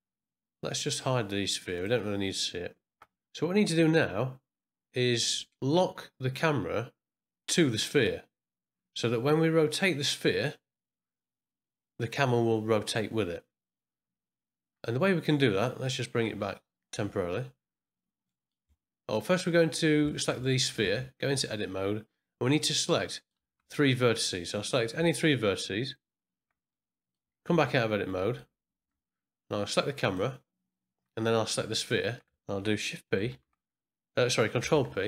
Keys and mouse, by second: 0.9 click, 1.8 click, 15.8 click, 16.9 z, 18.3 middle click, 18.7 ctrl+middle click, 19.1 click, 20.1 ctrl+middle click, 20.4 shift+middle drag, 20.9 ctrl+middle drag, 21.3 Tab, 22.6 click, 23.2 middle click, 23.4 z, 24.0 middle click, 25.0 shift+click, 26.7 middle click, 27.5 Tab, 28.1 middle click, 28.8 z, 30.0 click, 33.3 shift+p, 34.6 ctrl+p.